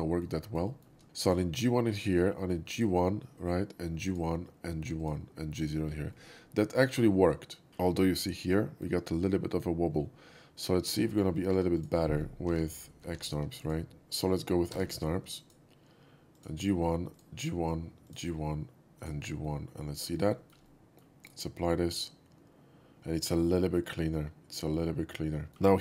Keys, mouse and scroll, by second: 0.0 alt+middle click, 0.4 shift+middle click, 0.7 shift+middle click, 1.3 shift+click, 2.8 shift+click, 4.1 click, 5.1 click, 6.2-8.9 middle drag, 10.0-10.9 shift+middle drag, 11.1 scroll down 1, 11.6 3, 11.8 click, 12.5 shift+x, 13.1 2, 13.7 click, 13.9 ctrl+z, 14.8 f, 15.5 click, 16.4 click, 17.2 click, 19.0 click, 19.5-20.1 middle drag, 20.2-20.5 shift+middle drag, 20.7-21.0 shift+middle drag, 21.3-21.7 shift+right drag, 21.7-25.6 shift+middle drag, 25.5 ctrl+z.